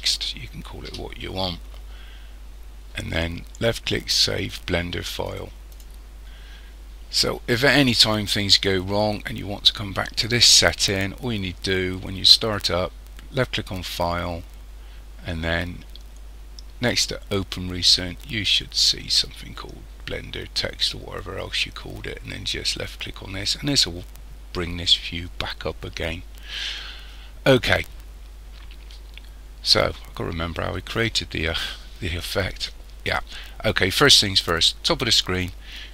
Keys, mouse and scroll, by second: 5.8 click, 12.5 click.